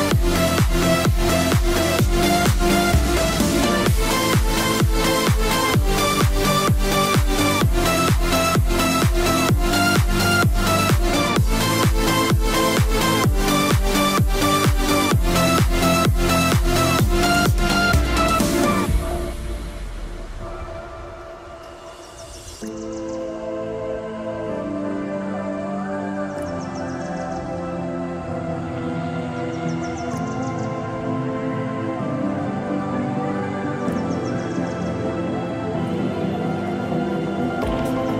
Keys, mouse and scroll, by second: 15.1 click, 21.9 Up, 24.2 click, 26.4 scroll up 1, 26.7 middle click, 28.3 scroll down 1, 28.5 middle click, 30.8 click, 33.8 scroll up 1, 35.9 scroll down 1, 36.2 middle click, 37.1 click.